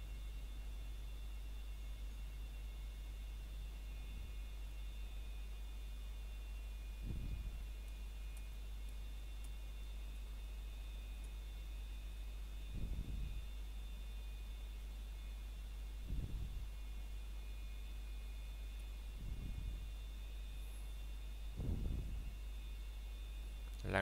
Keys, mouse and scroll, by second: 0.0 scroll up 1, 3.6 i, 9.5 click, 12.5 click, 21.8 middle click, 22.0 scroll down 1, 23.0 middle click.